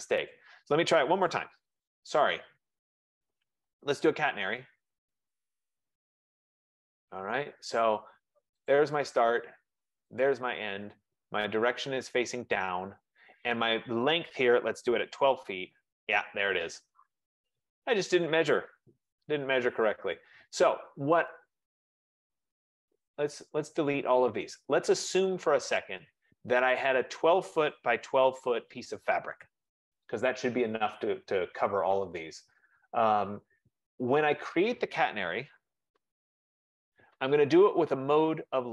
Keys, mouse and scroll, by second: 0.7-5.5 drag, 1.2-1.7 typing, 1.8 Return, 3.8-6.6 typing, 8.5 F15, 8.8 click, 10.3 click, 12.9 click, 14.9-15.4 typing, 17.4 click, 18.1-19.0 typing, 21.4 right click, 21.8 middle click, 21.9 middle click, 23.0 click, 24.1 click, 24.9 shift+click, 25.9 click, 26.8 click, 27.8-28.3 typing, 30.7 Delete, 34.9 right click, 35.6-36.8 typing.